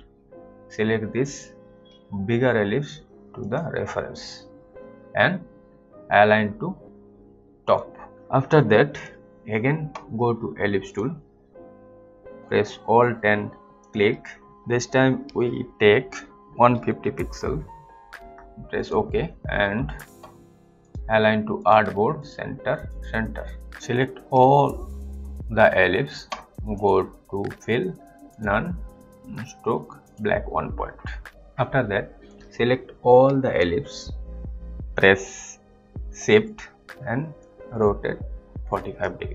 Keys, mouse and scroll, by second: 3.5 click, 7.6 click, 8.9 click, 13.8 alt+click, 16.4-17.8 typing, 18.8 click, 24.1 click, 26.8 click, 32.6 click, 37.6 shift+click.